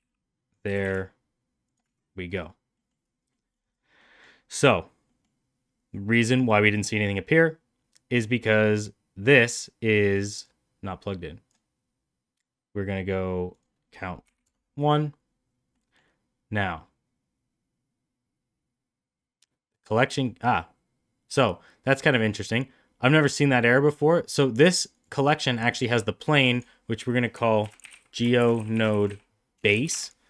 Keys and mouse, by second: 0.6 g, 2.7 middle click, 3.3 middle click, 4.1 middle click, 5.0 middle click, 10.3-11.4 drag, 13.5-14.8 drag, 15.8 middle click, 24.8 click, 26.2 click, 26.5-30.2 drag.